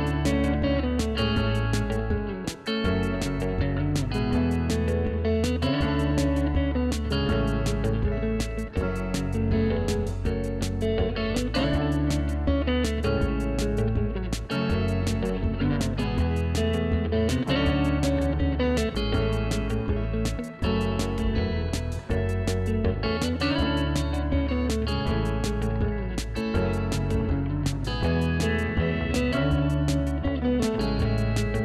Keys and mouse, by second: 0.9 ctrl+click, 1.8 click, 3.3 ctrl+1, 3.9 click, 5.6 KP_3, 5.8 Return, 7.1 click, 7.4 KP_2, 7.6 =, 7.7 Return, 8.2 click, 8.4 2, 8.5 Return, 9.7 click, 11.4 ctrl+z, 11.7 click, 11.9-15.0 typing, 13.0 click, 14.3 click, 15.1 Return, 16.4 click, 18.8 Delete, 19.4 ctrl+e, 19.5 click, 21.4 ctrl+1, 21.5 click, 21.7 ctrl+shift+x, 21.9 ctrl+1, 21.9 click, 24.2 Delete, 24.5 click, 25.0 Escape, 25.1 click, 25.3 ctrl+shift+x, 25.5 click, 25.8 ctrl+1, 25.8 click, 26.1 ctrl+e, 26.2 click, 26.3 ctrl+1, 26.4 click, 26.6 ctrl+e, 26.6 click, 27.3 ctrl+1, 27.4 click, 27.7 Delete, 28.8 click, 29.0 ctrl+1, 29.5 click, 31.4 click.